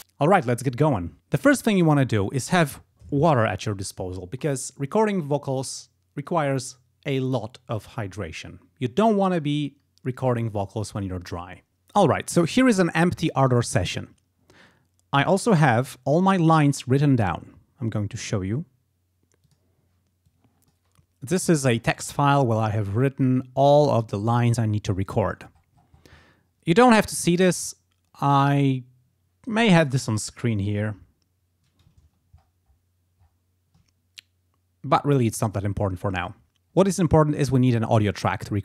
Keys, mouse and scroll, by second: 19.5 click, 20.3 click, 21.8-22.3 scroll up 2, 22.7-24.2 scroll down 6, 25.3-26.3 scroll up 4, 26.3 scroll up 1, 28.4-30.0 drag, 30.8-32.0 drag, 32.0-33.0 ctrl+scroll down 6, 33.2 ctrl+scroll up 2, 36.3 click.